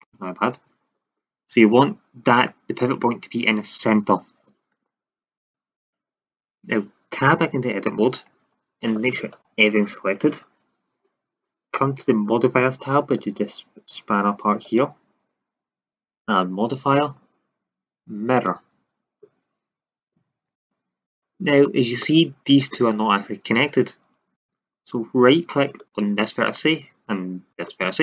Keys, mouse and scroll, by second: 7.3 Tab, 8.2 a, 8.5 a, 14.6-18.4 drag, 19.4-20.5 middle drag, 20.5 drag, 21.1-21.7 middle drag, 21.7 drag, 21.8-22.5 middle drag, 22.5-25.6 drag, 27.5 click.